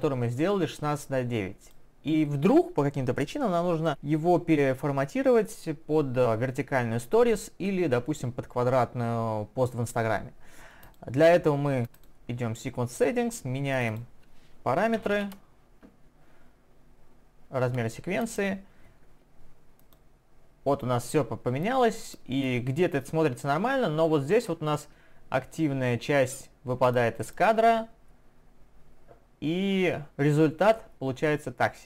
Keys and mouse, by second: 11.8 click.